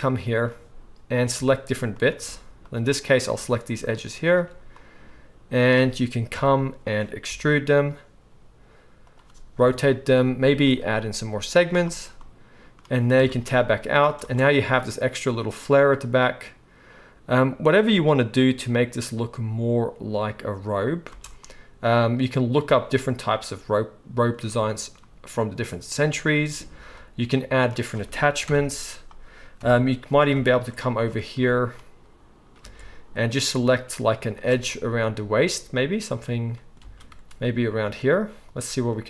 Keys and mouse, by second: 1.2 alt+click, 1.4 alt+a, 2.0 shift+middle click, 2.6 shift+click, 2.7-4.2 shift+middle drag, 4.2 shift+click, 4.3-7.5 shift+middle drag, 6.3 KP_3, 7.5 e, 9.6 r, 10.5 ctrl+r, 13.1 Tab, 14.2 space, 20.3-26.8 middle drag, 21.1 space, 28.5 shift+Left, 29.6 KP_1, 30.3 Tab, 32.6 alt+middle click, 32.7 alt+a, 33.3 click, 36.8 alt+a, 37.9 click, 37.9 ctrl+shift+middle click, 38.4 ctrl+shift+click, 38.5-39.0 ctrl+shift+middle drag.